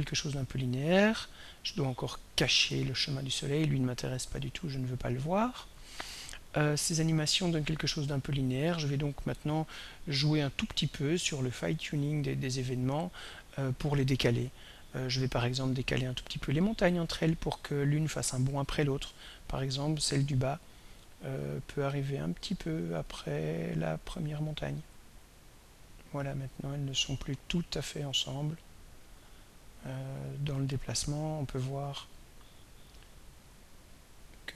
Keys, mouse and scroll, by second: 4.8 click, 6.9-15.0 drag, 16.0 click, 17.7 click, 21.4-22.3 drag, 23.1 click, 24.4-25.9 drag, 28.3 click, 29.9-32.6 drag, 33.5-34.5 drag.